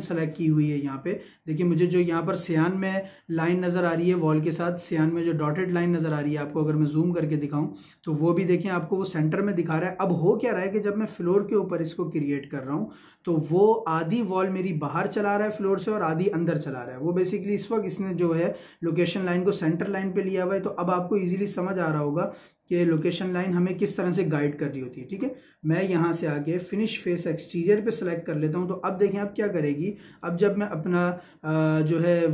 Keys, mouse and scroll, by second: 5.9-6.2 scroll up 1, 6.2 middle click, 7.4-9.2 scroll up 1, 9.4-10.5 scroll down 1, 18.2-18.8 scroll down 1, 20.6-20.9 scroll up 1, 21.6-22.1 scroll down 1, 24.6 scroll up 1, 25.0 Escape, 26.1-30.1 drag, 31.9-32.3 middle drag.